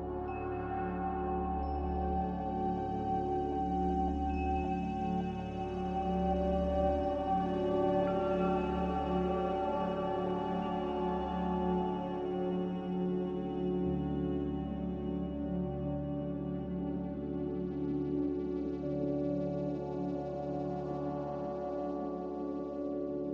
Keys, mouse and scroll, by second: 11.7 a, 18.1 typing, 18.4 Return, 19.5-22.7 typing.